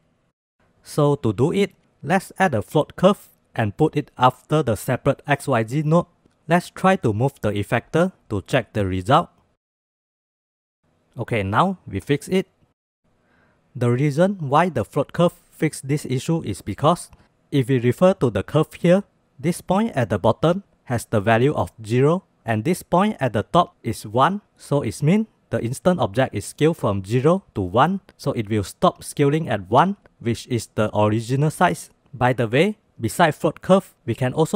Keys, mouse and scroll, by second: 1.3 shift+a, 8.2-13.0 drag, 25.6-32.0 drag.